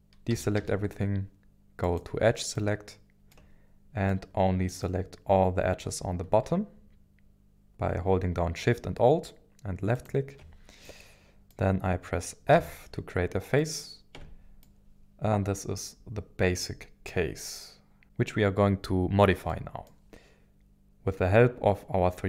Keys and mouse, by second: 0.3 a, 0.6 a, 0.6 a, 1.8 click, 2.5 middle click, 4.1 middle click, 10.8 middle click, 12.5 f, 13.6 middle click, 14.2 Tab, 14.6-18.0 middle drag, 19.5 middle click.